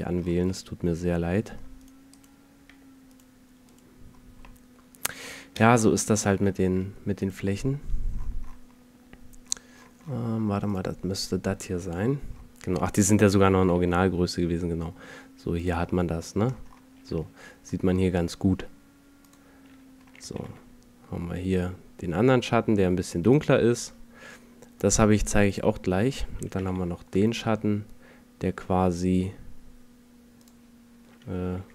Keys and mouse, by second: 2.7 z, 4.2-5.1 middle drag, 6.4 alt+z, 10.7-11.4 right drag, 12.4-12.9 middle drag, 13.6 g, 20.3 g, 25.6 right click, 26.6 g, 31.6 g.